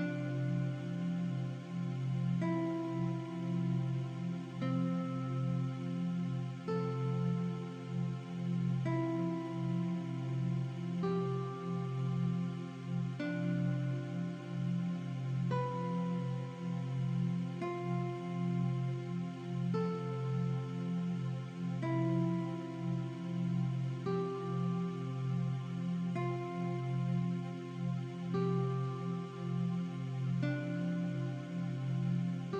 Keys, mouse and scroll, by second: 1.0 click, 1.6 Delete, 1.8 v, 2.1 click, 3.4 click, 8.1 click, 9.0 KP_Enter, 9.7 |, 10.1 click, 10.4 v, 10.6 click, 15.8 shift+click, 16.1 v, 16.6 click, 17.8 click, 19.3 click, 19.6 v, 21.6 click, 27.6 click, 28.3 KP_0, 29.0 click, 31.9 KP_0.